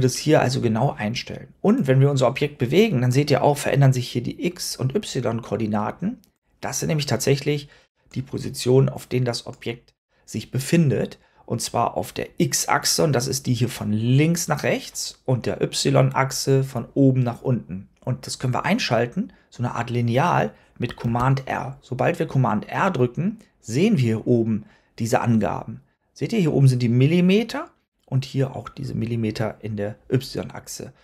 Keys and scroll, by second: 20.9 super+r.